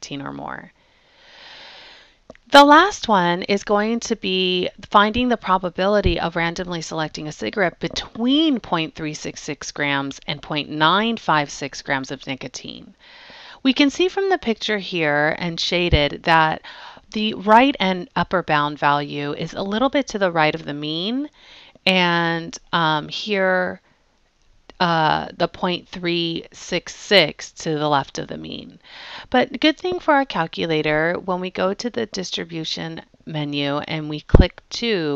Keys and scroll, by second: 34.7 2.